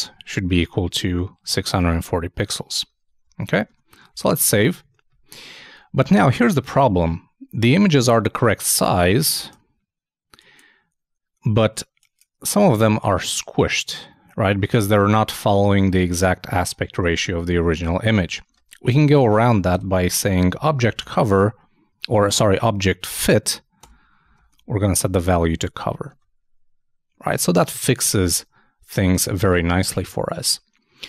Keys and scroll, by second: 3.4 super+s, 3.6 super+Tab, 18.4 super+Tab, 25.5 super+Return, 25.9 super+s, 26.1 super+Tab.